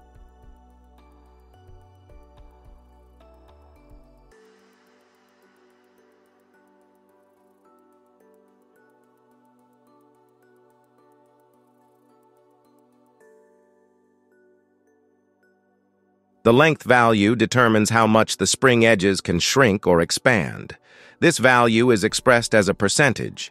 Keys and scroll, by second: 0.8 space, 6.9 shift+Left, 7.1 space, 12.0 space.